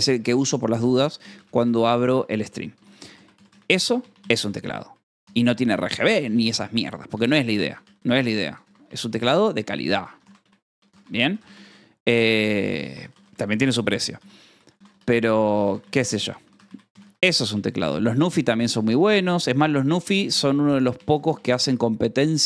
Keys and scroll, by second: 0.7-2.5 typing, 3.8 o, 6.6 w, 7.6 t, 9.0 p, 10.7 e, 12.3 m, 12.4 BackSpace, 16.5 r, 19.3 l, 20.7-21.5 typing.